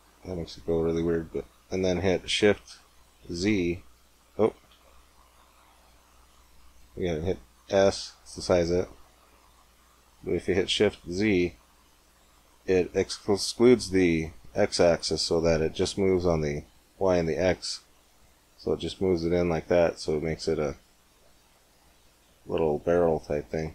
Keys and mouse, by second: 3.1 shift+z, 4.6 shift+z, 7.6 s, 18.4-21.9 drag, 22.9 Tab.